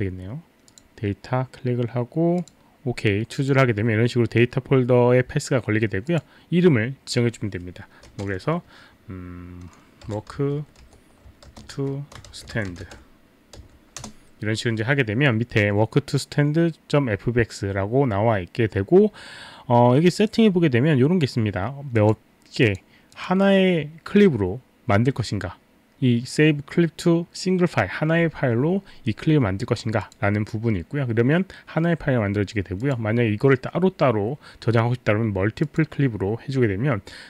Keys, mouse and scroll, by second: 0.7 click, 2.4 click, 6.0 click, 9.8-14.5 typing, 20.3 click, 22.0 click, 22.7 click, 23.1 click, 30.0 click, 32.8 click, 35.7 click.